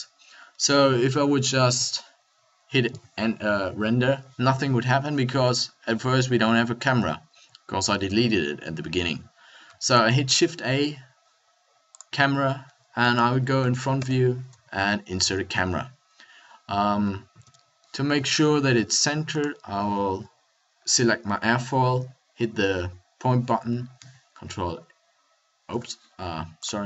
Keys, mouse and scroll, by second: 3.5 F12, 9.8 shift+a, 13.0 KP_1, 14.0 ctrl+alt+KP_0, 17.4 n, 22.3 KP_Decimal, 24.3 ctrl+alt+KP_0.